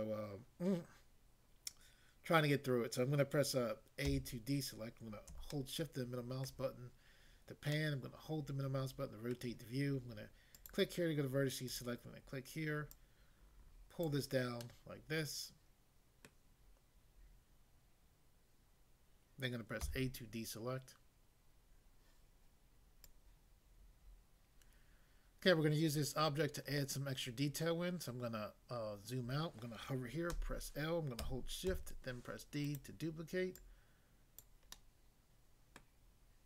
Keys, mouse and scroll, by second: 4.1 a, 5.6 shift+middle click, 9.4 middle click, 10.5 click, 11.7 click, 12.9 click, 14.0 click, 14.6 middle click, 16.2 middle click, 19.8 a, 23.0 click, 25.8 scroll down 1, 30.3 i, 31.7 d, 32.6 right click, 33.6 click, 34.4 click, 34.7 middle click, 35.8 middle click.